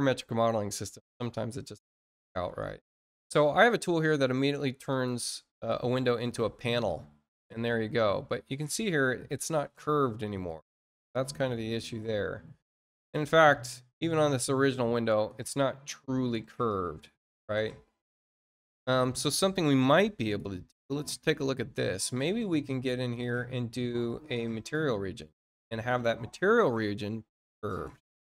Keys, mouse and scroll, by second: 4.8 click, 5.7 click, 20.1 click, 23.0 click, 24.0 click, 25.8 click.